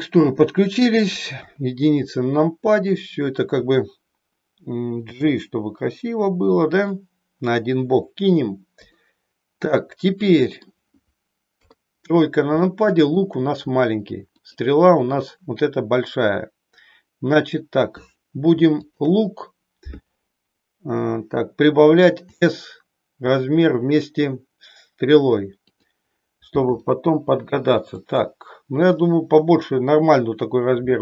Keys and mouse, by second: 0.0 click, 1.3 KP_1, 5.1 g, 6.8 click, 8.8 click, 9.8-10.8 middle drag, 11.6 KP_3, 12.7 shift+middle click, 14.3 click, 18.8 shift+click, 22.2 s, 26.8 g.